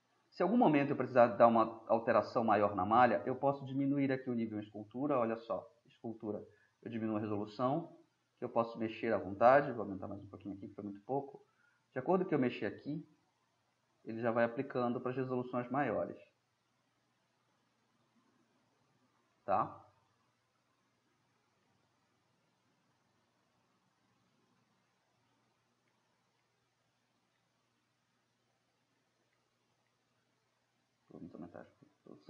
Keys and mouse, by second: 0.7-1.1 middle drag, 1.1-1.7 drag, 1.7-2.0 middle drag, 2.0-3.6 drag, 6.2-12.9 drag, 13.1 drag, 13.9-15.0 middle drag, 15.0-16.0 drag, 18.7-20.4 middle drag, 21.7-23.7 middle drag, 23.9-26.9 drag, 26.9-27.5 middle drag, 28.1-30.3 middle drag, 31.4-32.2 middle drag.